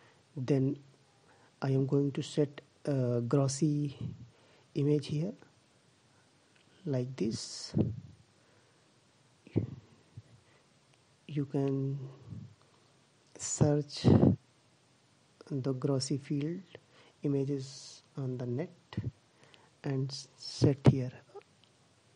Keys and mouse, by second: 5.3 click, 10.5-11.6 drag, 19.8 click.